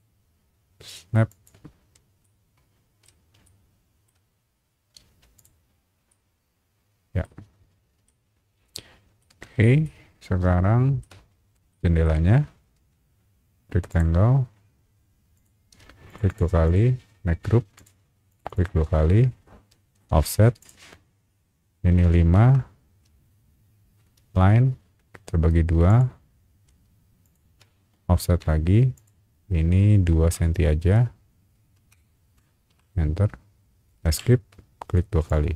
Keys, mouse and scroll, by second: 1.3 click, 1.8 middle click, 1.8 scroll up 1, 2.2 middle click, 3.2 scroll up 1, 3.4 shift+middle click, 4.6 scroll up 1, 5.0 space, 5.3 click, 6.1-7.2 middle drag, 7.4-7.9 scroll down 2, 8.0 shift+middle click, 8.9 scroll down 1, 9.2 shift+middle click, 9.8-11.0 shift+middle drag, 11.3 scroll down 1, 11.7 shift+middle click, 12.4 scroll up 1, 12.7 r, 13.9 click, 15.3 click, 15.7 space, 16.1 click, 16.3 click, 16.6 right click, 17.7 click, 18.3 click, 18.5 click, 19.9 f, 20.6 click, 22.1 KP_5, 22.3 KP_Enter, 24.2 l, 25.9 click, 27.2 shift+click, 28.3 f, 28.9 click, 30.3 KP_2, 30.5 KP_5, 31.9 BackSpace, 32.7 KP_Enter, 34.0 Escape, 35.3 click.